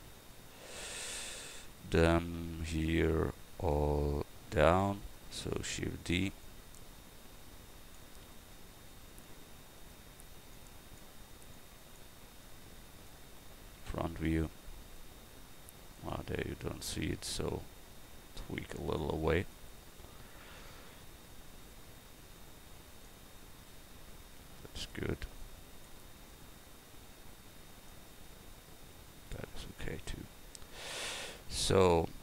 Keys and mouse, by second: 5.4 shift+d, 6.4-7.9 drag, 9.8-11.0 right drag, 10.5 click, 12.4-13.8 drag, 13.8 KP_1, 15.9-19.0 right drag, 16.6-19.0 drag, 19.5-23.0 right drag, 20.6-23.0 drag, 26.3-27.9 right drag, 26.3-27.9 drag.